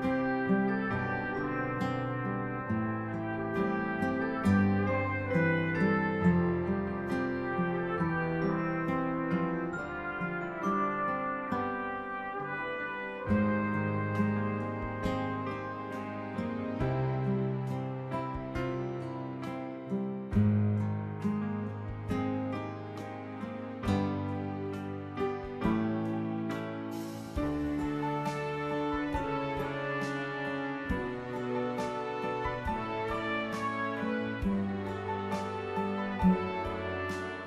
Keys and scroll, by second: 25.6-28.2 typing, 29.7-31.4 typing.